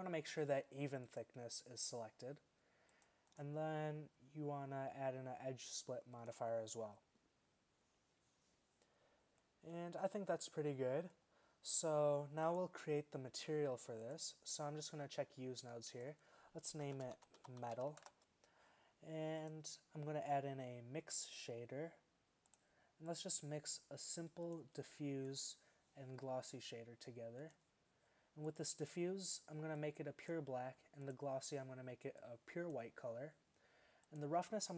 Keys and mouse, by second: 9.1-11.1 middle drag, 30.4-31.1 middle drag, 33.0-34.1 middle drag.